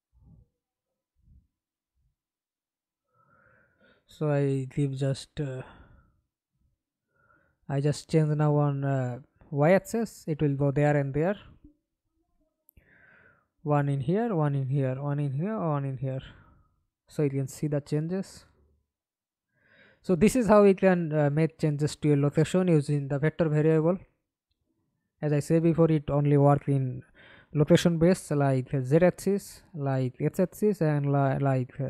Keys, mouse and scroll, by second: 1.4 ctrl+c, 2.6-3.1 typing, 3.6 Return, 5.7 double click, 6.2 double click, 6.7 middle click, 7.8 F11, 8.6 alt+p, 11.1 s, 11.6 s, 12.5 1, 14.3-19.4 typing, 20.4 Escape, 21.1 middle click, 21.9 F11, 25.0 double click, 31.5 middle click.